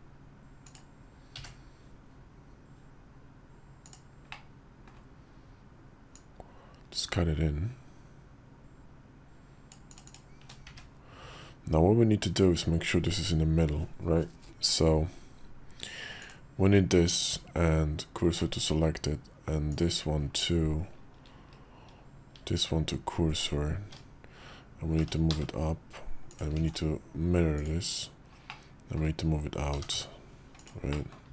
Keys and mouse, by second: 4.3 middle click, 10.1 shift+click, 17.2 shift+s, 22.2 shift+s, 24.9 g, 26.4 alt+x, 27.4 click, 28.3 click, 29.6 g, 30.9 click, 31.1 `.